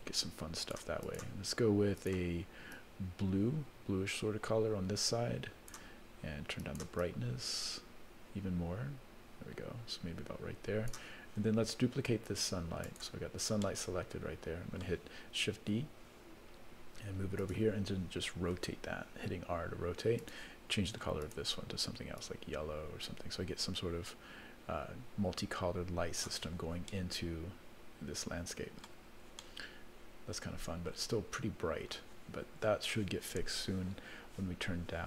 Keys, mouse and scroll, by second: 1.0 click, 2.0 click, 7.0-11.0 drag, 12.3 click, 12.9 click, 13.6-14.8 middle drag, 15.6 shift+d, 18.5 r, 21.2 click, 26.9-28.9 middle drag, 29.0-29.4 scroll up 4, 29.4-30.9 middle drag, 31.3-32.0 scroll down 2, 32.5-33.8 scroll down 1.